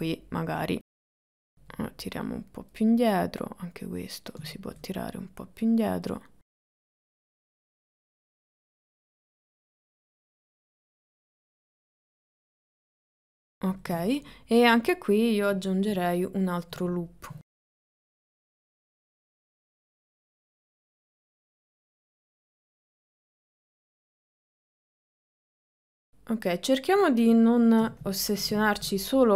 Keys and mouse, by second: 0.7 click, 1.0 click, 2.4 click, 3.4-4.4 drag, 4.7 shift+middle click, 5.6 click, 6.6 click, 7.2 click, 7.7 click, 8.4 click, 9.0 shift+middle click, 9.3 click, 9.7 click, 10.3 click, 10.7 click, 11.3 click, 11.7 click, 12.5 click, 12.8 click, 13.5 middle click, 14.1-16.0 shift+middle drag, 17.6 ctrl+r, 18.4 middle click, 18.7 shift+middle click, 19.0 click, 19.3 ctrl+middle click, 19.7 click, 20.1 click, 20.7 click, 21.0 click, 21.4 click, 21.8 click, 22.5 click, 22.8 click, 23.3 click, 23.6 click, 24.1 ctrl+middle click, 24.3 shift+middle click, 24.6 click, 25.2 shift+middle click, 25.3 middle click, 27.9 KP_1, 28.4 middle click, 28.7 middle click.